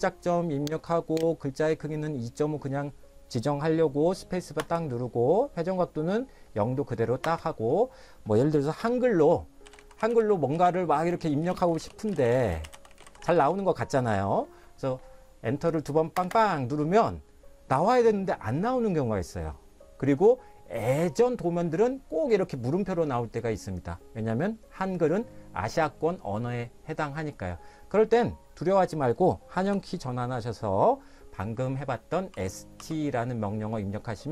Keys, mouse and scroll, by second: 0.9 click, 4.6 space, 7.2 space, 9.4-14.0 typing, 16.1 Return, 16.3 Return, 32.3 s, 32.8 t.